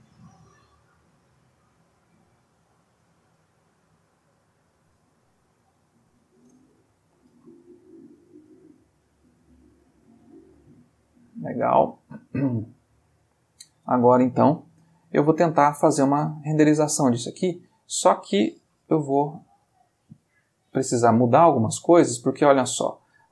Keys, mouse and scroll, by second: 1.6-2.4 drag, 2.7-3.5 drag, 3.6 click, 7.4-8.8 ctrl+middle drag, 9.5-11.5 middle drag, 11.7-13.6 ctrl+middle drag, 14.3 click, 15.4-18.0 ctrl+middle drag, 20.8 click, 22.5-23.3 drag.